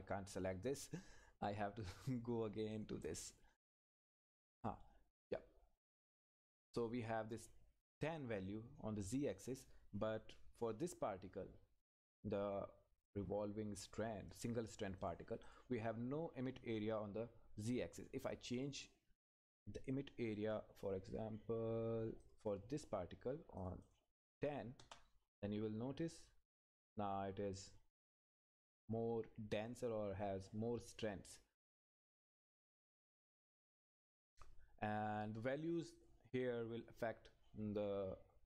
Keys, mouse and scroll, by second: 1.8 click, 15.0 click, 22.2 click, 24.8 Return, 35.6 click.